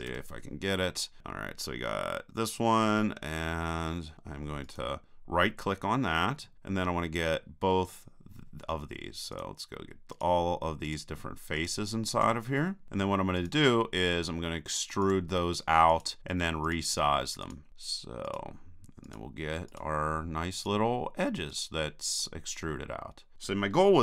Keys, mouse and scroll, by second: 0.1 KP_1, 4.6-6.4 right drag, 6.4-7.6 middle drag, 9.3-22.2 right drag, 22.2-23.3 middle drag, 22.7 click.